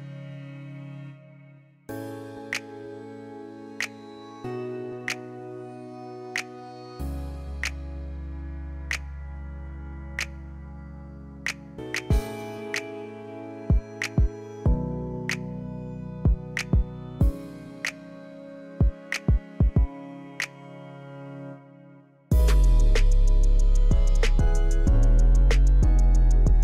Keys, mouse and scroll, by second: 1.1 scroll up 1, 1.2-2.6 middle drag, 7.5 click, 8.3 middle click, 9.2-11.7 middle drag, 13.5-15.6 scroll up 1, 15.6-17.3 scroll down 1, 17.3 middle click, 17.9 click, 19.4 click, 20.0 click, 21.9-23.0 middle drag, 23.8 click, 25.0 KP_0, 25.2 KP_3, 25.4 Return.